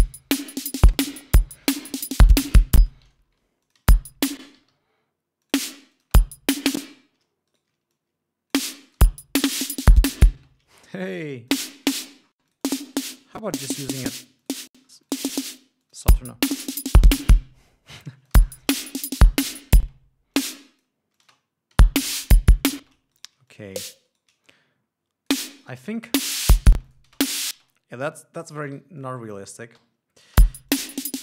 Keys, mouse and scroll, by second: 3.1 space, 3.5 ctrl+scroll up 1, 4.0 ctrl+click, 4.2 ctrl+space, 5.0 d, 5.8 ctrl+click, 6.3 click, 6.4 space, 7.1 ctrl+space, 7.2 ctrl+scroll up 2, 7.9 ctrl+shift+right click, 8.3 shift+click, 9.2 click, 9.4 space, 10.8 space, 11.2 shift+right click, 11.6 shift+click, 12.2 shift+click, 12.4-12.9 shift+scroll down 1, 12.9 click, 13.5-13.9 scroll down 1, 14.8 click, 15.1 scroll up 1, 15.4-15.9 scroll down 2, 15.4 click, 16.2 click, 16.4 space, 17.2 ctrl+scroll down 2, 18.4 click, 18.4 space, 19.1 ctrl+scroll up 2, 20.0 ctrl+scroll up 2, 20.2 ctrl+space, 20.7 ctrl+click, 21.5 click, 21.7 space, 22.8 ctrl+scroll down 2, 23.2 ctrl+space, 23.5 ctrl+shift+right click, 23.9 ctrl+shift+click, 24.5 shift+right click, 24.8 shift+click, 26.0 ctrl+scroll up 1, 26.4 ctrl+click, 26.5 ctrl+space, 27.2 space, 27.3 click, 28.0 click, 29.1 g, 29.4 click, 31.1 click, 31.1 l.